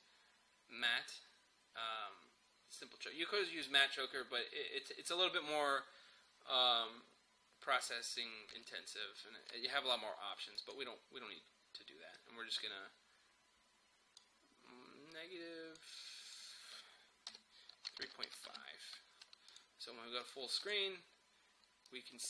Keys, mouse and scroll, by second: 10.6-16.3 drag, 17.3-18.9 typing, 19.5-22.2 drag.